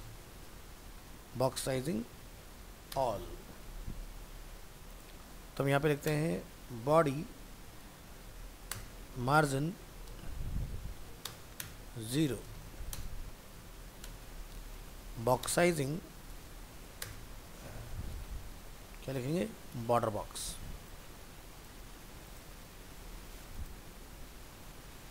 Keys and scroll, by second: 12.6 ctrl+shift+Left, 22.8 ctrl+s.